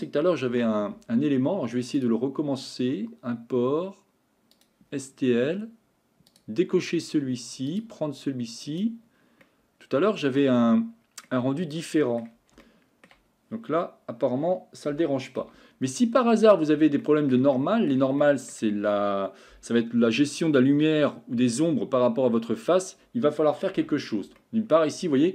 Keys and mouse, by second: 0.5 Delete, 2.0-4.8 drag, 9.8 middle click, 11.3-12.2 middle drag, 12.6-13.1 shift+middle drag, 14.9 g, 17.0 middle click, 17.6-17.9 shift+middle drag, 18.2 middle click, 23.9 Tab, 24.4 shift+middle click.